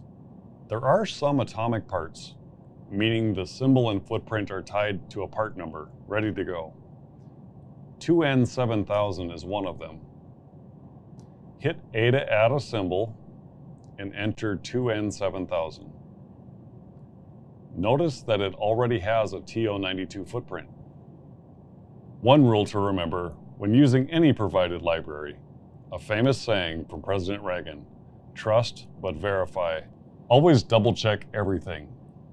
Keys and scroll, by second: 11.6 a, 13.2-15.1 typing.